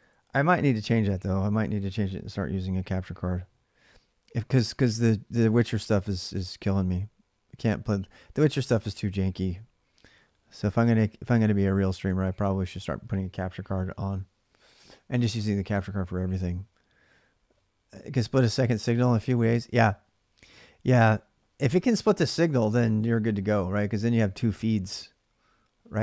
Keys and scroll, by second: 0.0-0.1 typing, 11.0-12.3 typing.